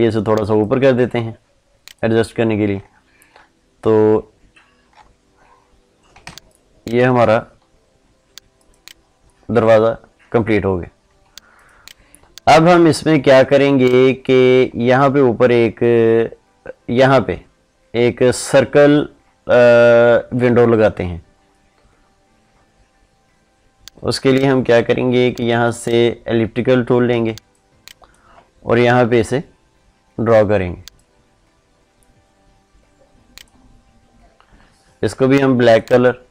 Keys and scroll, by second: 6.1 ctrl+space, 27.0 ctrl+space.